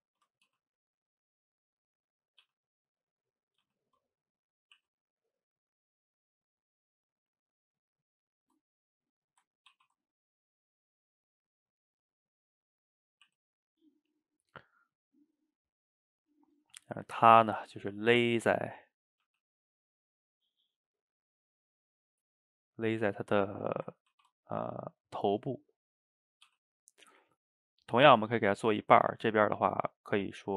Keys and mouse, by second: 0.5 g, 2.3 click, 2.4 g, 3.6 click, 3.6 g, 4.6 click, 4.8 e, 5.8-7.8 middle drag, 7.8 click, 7.9-9.7 middle drag, 9.7 ctrl+t, 11.3 click, 11.5-12.0 middle drag, 12.0 drag, 12.2-12.8 middle drag, 12.8 click, 13.3 e, 14.5-17.4 middle drag, 17.4 g, 18.5 middle click, 19.2 click, 19.2 g, 20.2-21.3 middle drag, 21.3 g, 22.1-24.1 middle drag, 24.1 ctrl+t, 25.3-26.3 middle drag, 26.3 click, 26.5 g, 27.3-28.8 middle drag, 28.8 drag, 29.1 ctrl+x, 30.0 click.